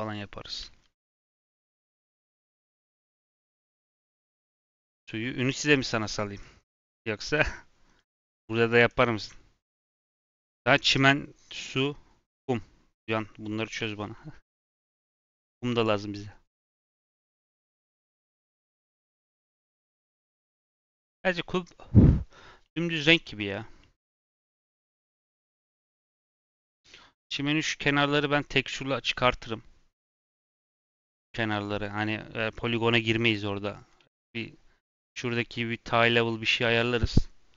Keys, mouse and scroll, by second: 0.6 shift+middle click, 0.9 scroll up 1, 1.4-4.0 shift+middle drag, 4.0 ctrl+z, 4.2 ctrl+z, 4.7 Tab, 5.7-6.2 scroll down 3, 7.5-7.9 scroll down 2, 7.9 click, 8.2 g, 9.1 shift+middle click, 9.2 scroll up 2, 9.8-11.3 shift+middle drag, 11.3-14.3 scroll down 1.